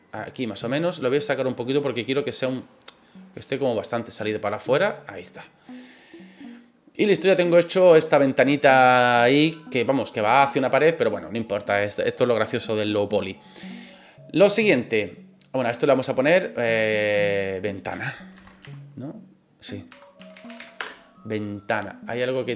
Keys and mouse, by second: 1.5 click, 2.6-3.8 drag, 4.5 right click, 4.8 middle drag, 5.6-9.6 middle drag, 14.0 middle click, 16.1 right click, 17.1 click, 17.3-21.9 drag.